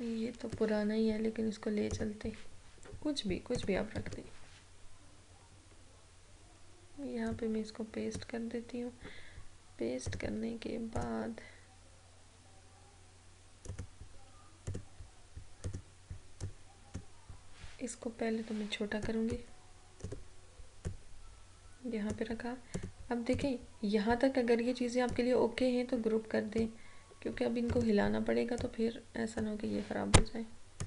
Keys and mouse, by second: 0.4 ctrl+c, 1.9 click, 4.0 ctrl+v, 7.4-10.2 drag, 13.7-19.0 drag, 19.0-27.8 drag, 27.8 ctrl+g, 28.7-30.8 drag.